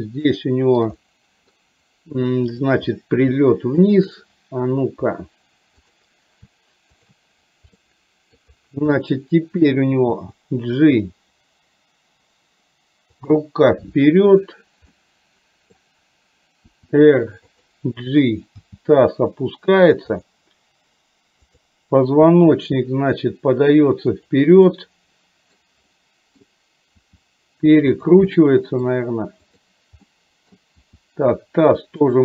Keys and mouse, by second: 0.3 shift+middle click, 0.9 middle click, 4.0 shift+click, 6.0 click, 7.8 middle click, 9.0 middle click, 10.2 g, 14.4 click, 14.9 middle click, 16.8 r, 18.6 g, 21.5 click, 22.5 r, 24.8 middle click, 26.1 middle click, 27.2 r, 28.5 middle click, 29.6 click, 30.1 middle click, 31.0 r.